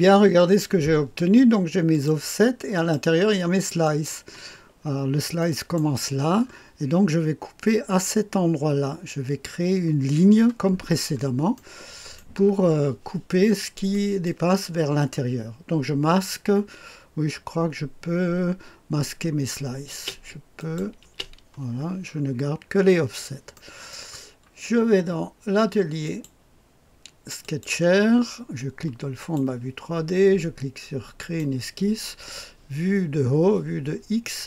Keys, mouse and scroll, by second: 0.3-1.8 scroll down 1, 1.8 click, 2.7 click, 3.8 click, 4.5 click, 4.7-5.7 scroll up 1, 5.3-6.3 middle drag, 6.3-7.3 scroll up 1, 10.5-11.5 scroll down 2, 11.5 click, 12.3 middle click, 13.3-13.8 scroll down 2, 13.8 middle click, 19.8 space, 20.5 click, 21.0 space, 22.0-22.8 scroll up 2, 22.8-23.5 scroll down 2, 23.5 click, 24.1-25.9 scroll down 2, 25.9 click, 27.3 click, 29.1 click, 31.1 click, 31.6-33.8 drag.